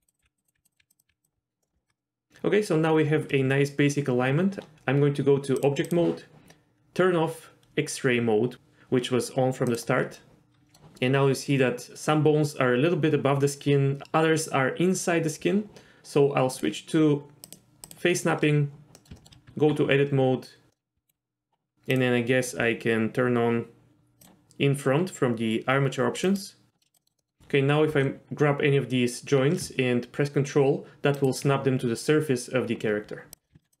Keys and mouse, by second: 0.0-1.1 typing, 0.1 click, 0.4 click, 0.7 click, 1.0 click, 1.6 middle click, 1.7 shift+middle click, 1.9 middle click, 5.6 drag, 9.7 click, 10.1-10.7 middle drag, 16.6-18.9 drag, 19.0 middle drag, 19.1 shift+middle click, 19.4 Tab, 20.7 middle click, 20.9 z, 24.2 click, 26.2 click, 26.8 middle click, 27.0 middle click, 27.1 click, 27.2 middle click, 27.9 g, 33.3 click, 33.4 middle click, 33.5-33.8 typing.